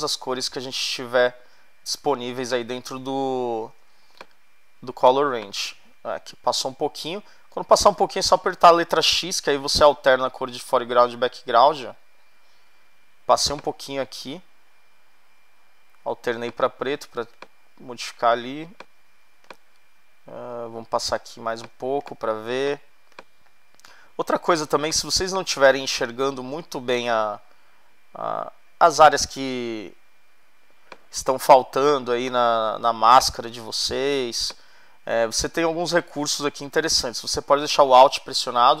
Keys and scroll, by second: 3.4 ], 5.0 ], 6.3 x, 9.5 x, 16.9 x, 21.7 space, 31.5 space.